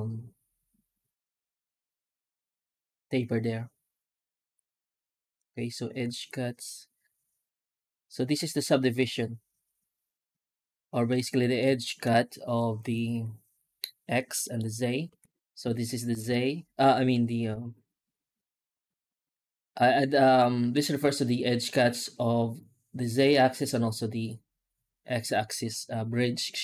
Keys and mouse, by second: 11.2 middle click, 11.7 shift+middle click, 13.0 F9, 14.3 middle click, 15.0 F9.